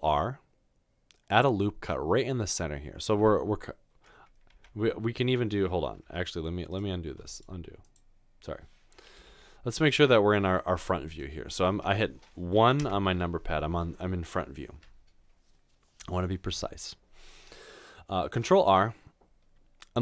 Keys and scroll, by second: 6.0 Escape, 9.2 3, 18.4 ctrl+r.